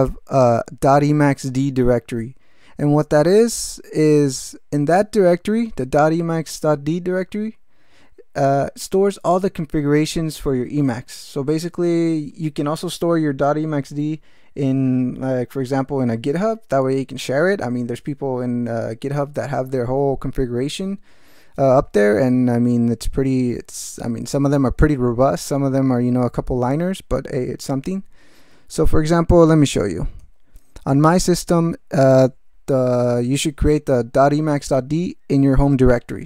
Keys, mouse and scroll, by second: 30.2 ctrl+alt+t.